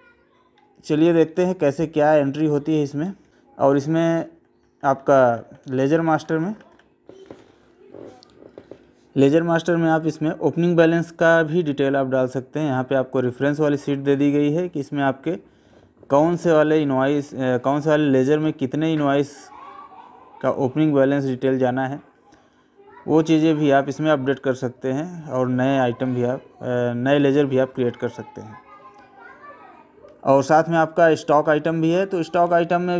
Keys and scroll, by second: 0.5 Right, 3.4 Left.